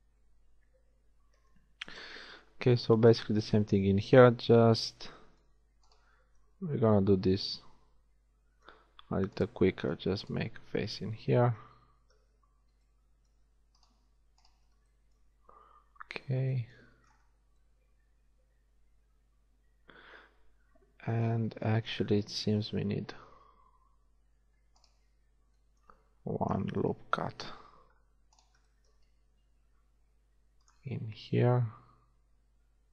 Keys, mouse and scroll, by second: 1.0 z, 1.6-2.6 middle drag, 9.4 click, 11.2 shift+f, 22.6 ctrl+shift+r, 26.5 KP_1, 27.2 ctrl+r, 29.6 ctrl+r.